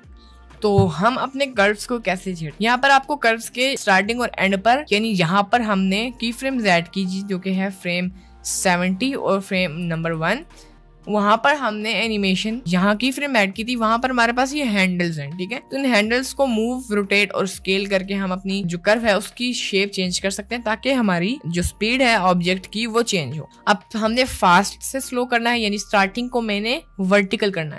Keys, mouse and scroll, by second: 6.6 click, 8.8-9.4 drag, 9.9 ctrl+z.